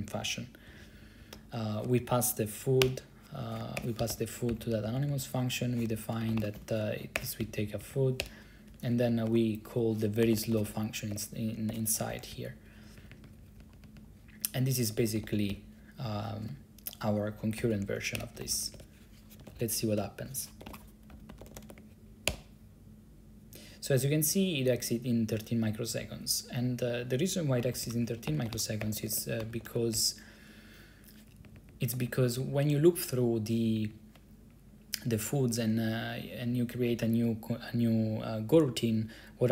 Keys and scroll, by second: 0.8 Left, 0.9 Left, 1.0 Left, 1.3 Right, 1.5 Right, 2.9-3.9 typing, 4.1 Right, 4.6 Left, 4.7 Left, 4.8 Left, 5.0 Left, 5.1 Left, 5.2 Left, 5.7-7.3 typing, 7.5 Right, 7.7 Right, 7.9 Right, 8.3 Return, 8.8 Return, 9.4 shift+Tab, 10.1-12.9 typing, 13.1 Down, 13.2 Down, 13.4 Down, 13.8 Up, 13.8 Up, 13.9 Up, 14.1 Up, 14.6 Down, 14.6 Down, 15.2 ctrl+c, 15.3-16.3 typing, 17.5-22.9 typing, 18.3 Return, 27.5-31.1 typing, 31.4 Down, 31.6 Down, 31.7 Down, 31.8 Down, 31.9 Down, 32.2 Down, 32.3 Down, 32.5 Down, 32.7 Down, 32.9 Down, 33.9 Down, 34.0 Down, 37.0 Up.